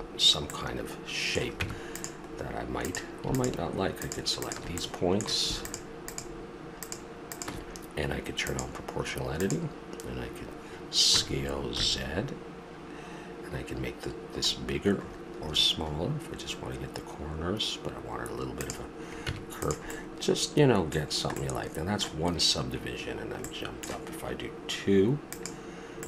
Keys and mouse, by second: 0.7-1.5 middle drag, 1.5 Tab, 2.2 middle click, 2.8-4.8 right drag, 4.8 click, 11.1 s, 19.3 Tab, 19.9-20.3 middle drag, 25.3-26.0 middle drag.